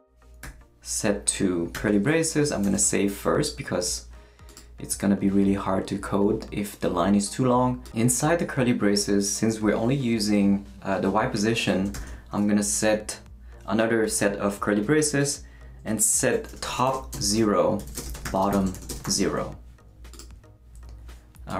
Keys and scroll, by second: 0.4 =, 1.4 shift+=, 1.7 shift+[, 2.5 shift+super+[, 2.6 shift+super+s, 11.9 shift+[, 16.3-19.5 typing.